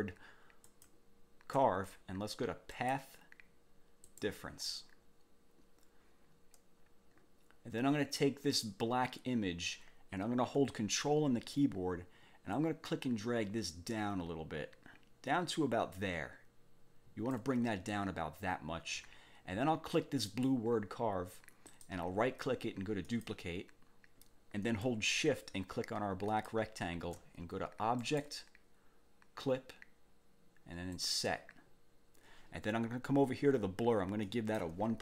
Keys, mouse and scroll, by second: 0.6 shift+click, 2.8 click, 4.0 click, 12.5-17.5 ctrl+drag, 20.2 click, 21.7 click, 23.0 click, 26.3 shift+click, 28.0 click, 30.9 click, 34.3 click.